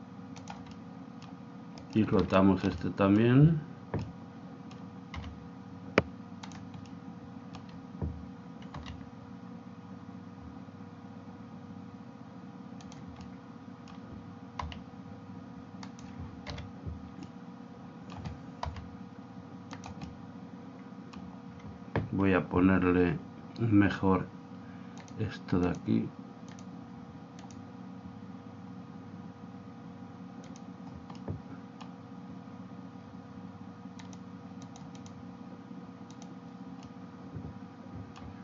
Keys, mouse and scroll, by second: 0.7 click, 1.9-4.1 right drag, 2.8-5.8 middle drag, 5.3 r, 6.9-8.7 middle drag, 8.7 r, 13.0 click, 13.2-15.2 middle drag, 14.8 r, 16.5 KP_7, 17.2 middle click, 18.8 r, 20.0 click, 20.1-21.8 middle drag, 25.0-28.2 drag, 30.5 click, 31.1-32.2 middle drag, 32.3-33.6 middle drag, 34.0-36.6 drag, 36.8-38.4 middle drag.